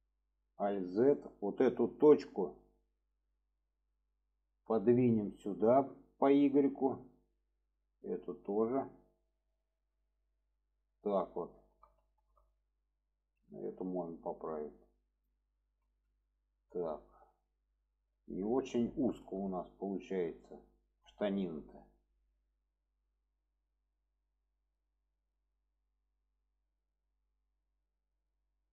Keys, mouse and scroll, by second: 0.5 alt+z, 1.0-1.5 middle drag, 2.1-2.5 middle drag, 3.1 click, 3.7 middle click, 4.8 click, 5.8 click, 7.7 click, 8.3 click, 9.6-10.2 drag, 10.2-10.7 middle drag, 11.2 alt+middle click, 12.0 shift+middle drag, 13.1 click, 13.9 click, 15.8 alt+z, 16.3-16.9 middle drag, 17.2-18.5 middle drag, 19.2 shift+middle drag, 20.4-21.7 middle drag, 21.9-22.6 middle drag, 23.7-25.2 middle drag, 25.6-28.7 middle drag.